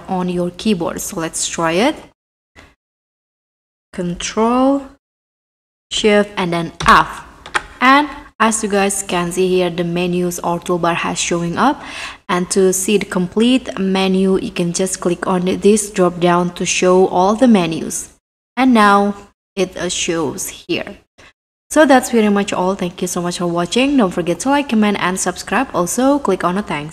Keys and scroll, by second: 0.0-0.1 typing, 3.6 2, 8.2 3.